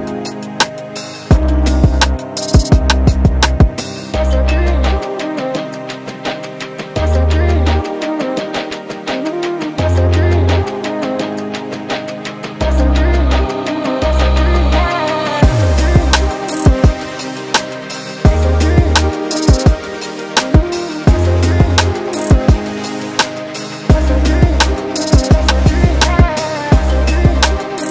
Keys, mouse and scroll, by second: 4.9 click, 5.5 click, 6.2 ctrl+shift+t, 11.1 click, 11.9 click, 12.9 ctrl+shift+t, 19.1 ctrl+shift+t, 27.1-27.9 scroll down 3.